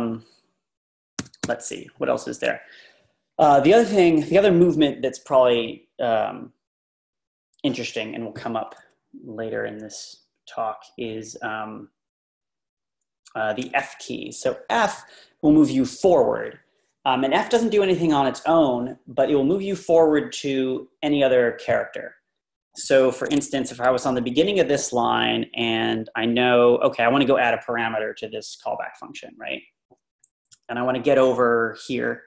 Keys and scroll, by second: 1.3 typing, 23.3 Escape, 23.5 Page_Down, 23.6 Page_Down, 23.7 Page_Down, 23.9 Page_Down.